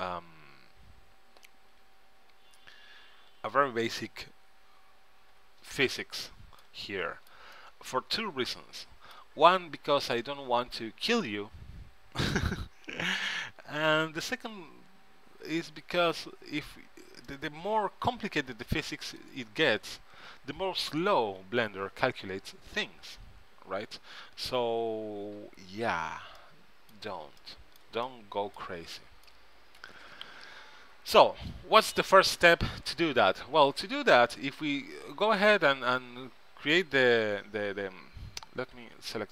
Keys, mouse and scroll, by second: 1.2 middle click, 1.5 middle click, 1.9 middle click, 4.5 t, 5.5 n, 6.1-8.5 middle drag, 17.4-19.4 middle drag, 26.5 middle click, 31.0-34.0 middle drag, 34.2-35.9 middle drag, 37.5 Tab, 38.6 Tab, 38.9 a, 39.1 a.